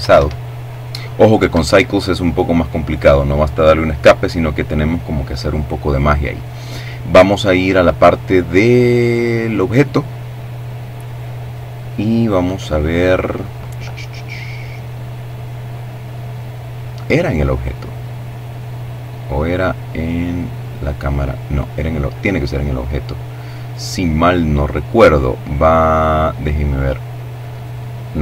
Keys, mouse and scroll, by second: 0.1 Escape, 1.4 right click, 8.2 click, 9.0-10.0 scroll down 1, 10.0-10.4 scroll down 1, 16.0 click, 17.8 click, 18.6-19.3 scroll down 1, 21.9 click, 23.4-24.1 scroll up 2, 24.3-24.9 scroll down 2, 26.0 click, 27.1-27.6 scroll down 1, 27.6 scroll down 1, 28.1 click.